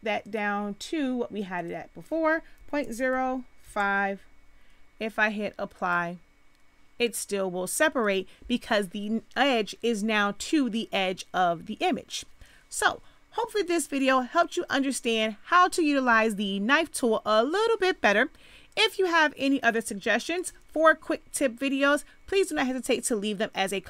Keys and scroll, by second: 2.5 ., 2.8 0, 3.0 5, 3.6 Return, 18.4 space.